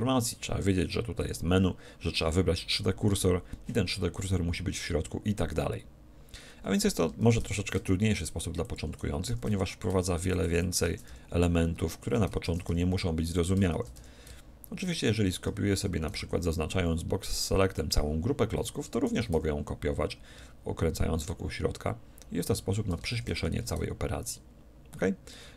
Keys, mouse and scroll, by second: 1.2-2.9 drag, 7.2 shift+d, 8.8-16.6 drag, 9.3 shift+d, 10.8 shift+d, 12.5 shift+d, 13.7 shift+d, 15.7 a, 16.2 b, 19.0 shift+d, 22.6-24.3 drag, 23.1 shift+d.